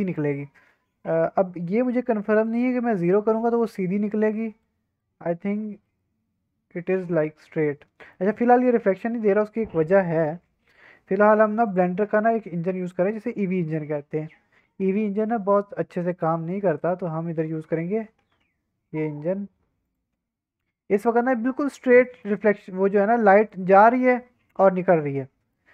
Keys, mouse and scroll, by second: 2.4 click, 3.4-4.0 drag, 3.4 middle click, 4.0-4.3 middle drag, 4.3 drag, 4.7 scroll up 2, 5.0-5.6 drag, 5.0 middle click, 5.6 middle click, 5.8 scroll down 1, 6.0-6.8 middle drag, 6.8-7.2 drag, 7.4-8.1 middle drag, 8.1 scroll up 1, 8.6 scroll down 1, 11.6 click, 12.8 click, 13.5-15.3 drag, 16.3 click, 17.9 scroll up 1, 18.2 alt+a, 18.4-18.7 scroll down 1, 18.7-19.1 scroll up 1, 19.8 click, 21.4 middle drag, 21.7 scroll down 1, 22.0 middle drag, 23.3 middle drag, 25.5-25.7 middle drag.